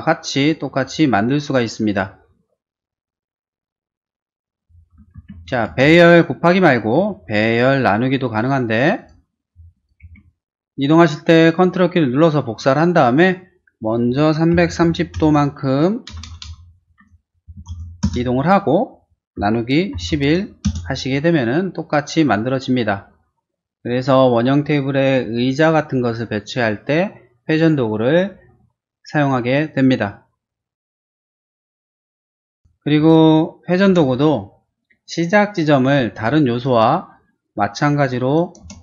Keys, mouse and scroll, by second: 5.2 ctrl+z, 5.7 space, 6.3 click, 7.1 q, 9.0 click, 9.8 click, 14.3-18.2 typing, 19.3-20.5 typing, 20.7 Return, 32.5 space, 32.9 q, 33.9 space, 36.3 r, 36.6 click, 38.3 click, 38.7 space.